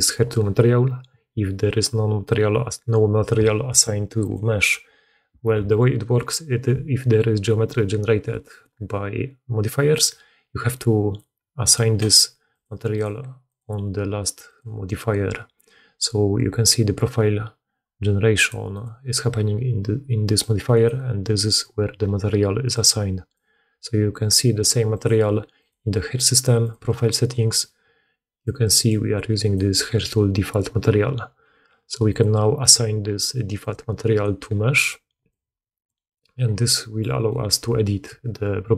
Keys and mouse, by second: 4.2 middle click, 4.5 click, 4.6-11.5 middle drag, 11.5 click, 11.6 middle click, 12.3-18.7 drag, 18.7-20.3 middle drag, 20.3-28.6 drag, 28.6 middle click, 28.7-32.0 drag, 32.0-33.4 middle drag, 33.4 click, 33.5-34.7 middle drag, 34.7-38.7 drag.